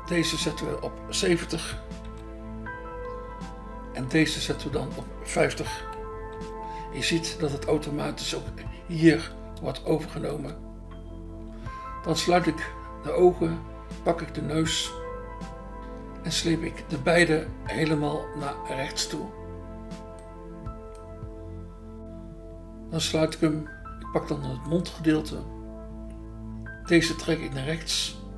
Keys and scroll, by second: 1.6 7, 2.0 0, 6.0-6.8 typing, 10.3 BackSpace.